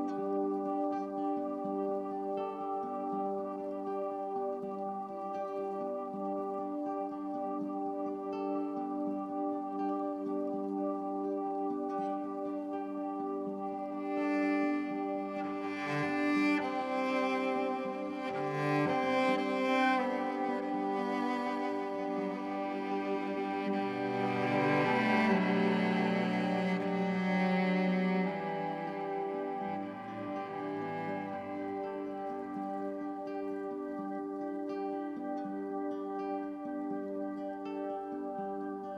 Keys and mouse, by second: 0.1 alt+click, 1.3 click, 3.3 click, 4.4 click, 5.8 click, 8.8 click, 10.8-14.5 drag, 18.1-22.5 alt+drag, 23.1 1, 26.8-28.0 drag, 30.8-32.4 drag, 32.8 ctrl+z, 34.7 ctrl+alt+click, 35.5-37.2 drag, 37.7-38.8 drag.